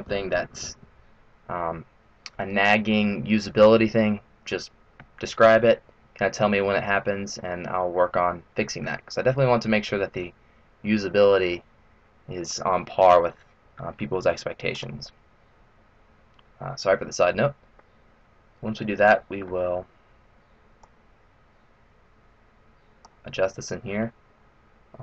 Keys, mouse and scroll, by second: 17.8 middle click, 19.0 middle click, 20.9 click, 23.7-24.4 scroll down 1, 24.4-25.0 scroll down 2.